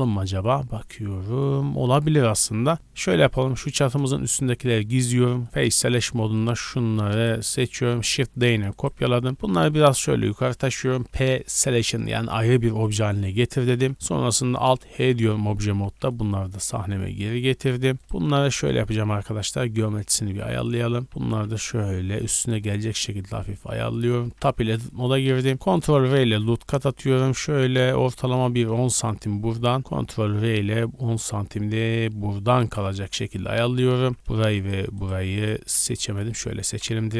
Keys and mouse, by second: 0.0 shift+middle click, 0.8-1.2 middle drag, 1.4-2.7 drag, 2.7 alt+h, 3.2-3.6 shift+middle drag, 3.6 shift+click, 3.9 middle click, 4.2 h, 4.8 click, 4.9 middle click, 5.0 Tab, 5.6 3, 5.8 click, 5.9-7.2 middle drag, 7.2 shift+click, 7.2 shift+middle click, 8.1 shift+click, 8.3 shift+d, 9.3 g, 9.9-14.4 right drag, 11.0 p, 13.5 Tab, 14.4-15.8 alt+drag, 14.8 alt+h, 15.6 a, 15.8 right click, 15.8 a, 16.2-17.3 middle drag, 17.4 middle drag, 17.7 middle click, 18.0-18.5 shift+middle drag, 19.0 w, 20.3-21.0 shift+middle drag, 21.0 click, 21.0 g, 21.1-24.1 middle drag, 24.3 Tab, 24.9 shift+middle click, 25.5 ctrl+r, 27.3 shift+middle click, 27.3-28.8 shift+drag, 28.9 ctrl+r, 28.9 ctrl+click, 29.7 click, 29.8-32.7 shift+middle drag, 32.9 z, 33.3 3, 33.7 a, 33.9 a, 34.6 shift+click, 35.9-37.1 typing, 36.8-37.1 drag.